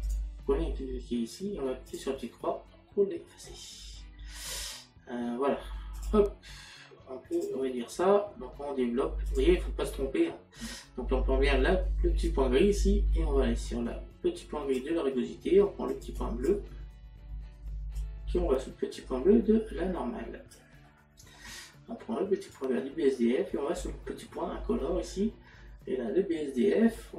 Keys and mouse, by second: 0.1 click, 1.9 click, 4.1 middle click, 6.0 click, 7.4 click, 9.3 click, 12.3 click, 15.9 click, 18.0 click, 20.9 middle click, 22.6 click.